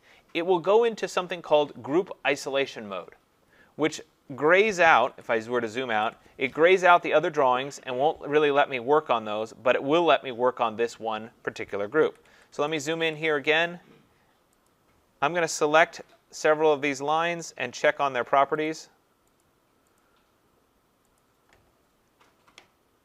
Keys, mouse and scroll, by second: 5.1 ctrl+-, 5.4 ctrl+-, 5.9 ctrl+-, 12.0 ctrl+=, 12.4 ctrl+=, 12.5 ctrl+=, 12.8 ctrl+=, 13.1 ctrl+=, 14.7 click, 17.2 shift+click, 17.9 click, 18.7 click, 19.4 click, 20.0 shift+click, 21.2 click.